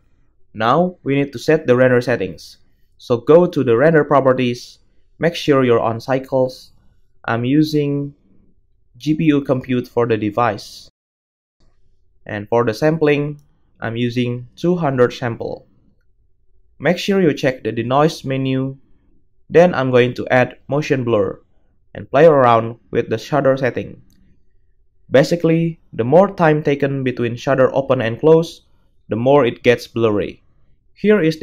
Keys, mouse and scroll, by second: 15.6 0, 19.4 middle click, 19.6 click, 19.7-22.2 middle drag, 22.2-31.4 drag.